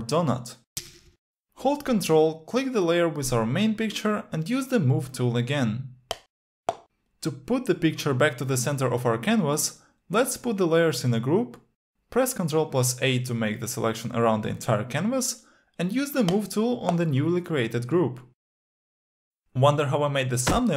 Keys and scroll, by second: 0.0 alt+Delete, 10.6 ctrl+g, 12.6 ctrl+a.